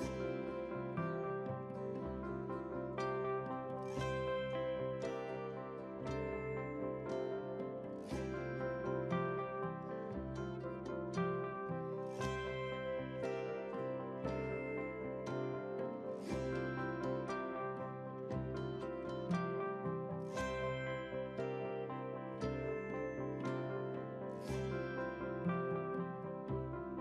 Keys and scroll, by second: 12.3 ctrl+a.